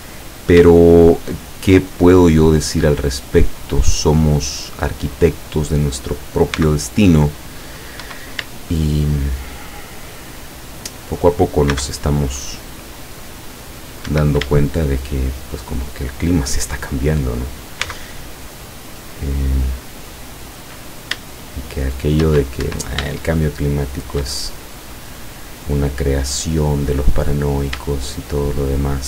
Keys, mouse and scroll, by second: 0.8-5.3 shift+middle drag, 5.4-5.8 scroll up 2, 6.5 c, 7.1 click, 8.0 Escape, 8.6 shift+middle click, 9.5 shift+middle click, 9.9-11.0 shift+middle drag, 11.8 c, 12.4 click, 13.8 click, 14.2 Escape, 14.6 shift+middle click, 14.9 shift+middle click, 15.3 shift+middle click, 15.5 shift+scroll up 1, 15.8-17.1 shift+middle drag, 17.8 c, 18.6-20.5 drag, 21.7 shift+middle click, 22.7 shift+Escape, 23.6 shift+click, 24.6-26.6 shift+drag, 26.8 click, 27.0-27.7 scroll up 2, 28.0 shift+middle click, 28.9 shift+scroll up 1.